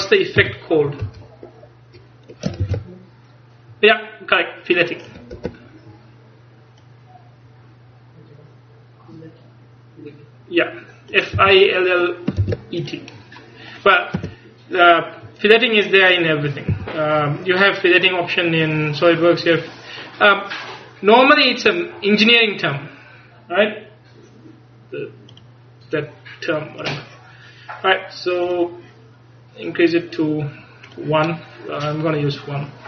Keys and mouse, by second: 0.5 KP_1, 1.1 KP_3, 2.7 ctrl+r, 6.9-9.2 drag, 11.5 a, 12.5 ctrl+s, 13.2-14.6 drag, 14.2 Tab, 16.8 a, 17.9-19.7 middle drag, 25.4-27.2 drag, 28.5-30.5 drag, 30.9 click.